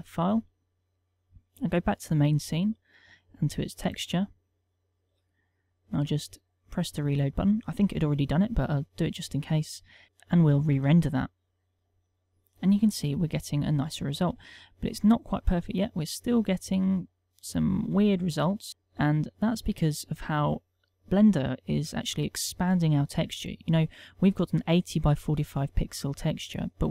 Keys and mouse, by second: 0.8 click, 4.0 click, 5.6 middle click, 7.2 click, 8.5 middle click, 10.0 click, 11.1 F12, 19.0 middle click.